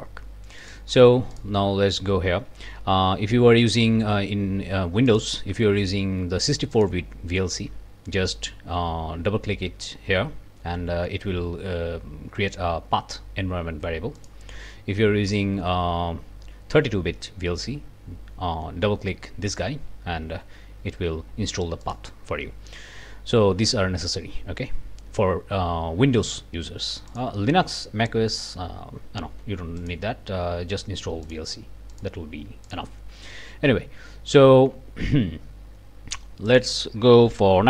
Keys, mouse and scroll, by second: 0.6 click, 1.4 click, 5.1 click, 6.7 click, 14.2 click, 15.3 click, 21.8 click, 27.1 click, 29.8 click, 31.2 click, 31.9 click, 32.7 click, 36.5 click.